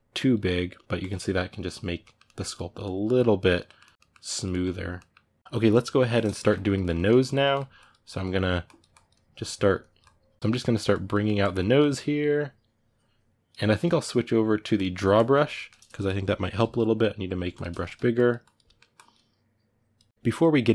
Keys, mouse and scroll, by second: 0.9 middle click, 1.4 click, 1.8 ctrl+middle click, 2.3 click, 2.8 middle click, 3.2 click, 3.4 ctrl+middle click, 4.0 click, 4.3-7.5 middle drag, 7.5-10.4 drag, 10.4 middle click, 10.7 click, 10.9 middle click, 11.2 click, 11.4 middle click, 11.6-15.3 drag, 15.3-16.4 ctrl+middle drag, 16.4 f, 17.6 ctrl+middle click, 17.9 click, 18.4 middle click, 18.7-19.8 drag, 19.8 middle click, 20.1-20.7 drag.